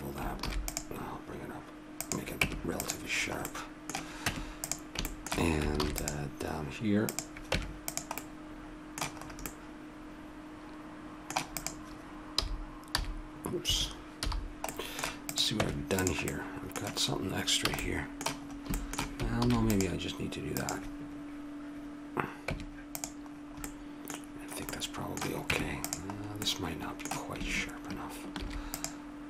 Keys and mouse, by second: 0.4 ctrl+r, 2.4 Tab, 4.4 Tab, 5.8 ctrl+r, 7.7 Tab, 10.7 middle click, 11.5-13.4 drag, 12.3 g, 14.2 h, 14.7 middle click, 15.3-17.1 drag, 15.5 Tab, 17.8 a, 19.4 ctrl+r, 22.5 Tab, 23.6 middle click, 25.4 Tab, 28.4 ctrl+r.